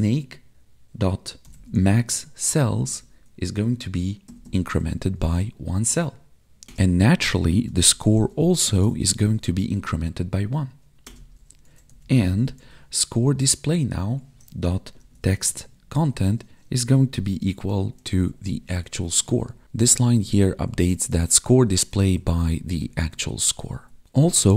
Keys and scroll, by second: 2.7 Down, 2.9 Tab, 14.0 Tab, 16.1 Tab, 16.6 space, 17.3 space, 18.8 ctrl+s, 19.5 ctrl+Down, 20.1 ctrl+Left, 21.3 ctrl+shift+Right, 21.5 ctrl+shift+Left, 21.7 ctrl+shift+Right, 22.8 ctrl+shift+Right, 23.1 ctrl+shift+Left, 23.3 ctrl+shift+Right, 23.4 ctrl+shift+Left, 23.5 ctrl+shift+Right.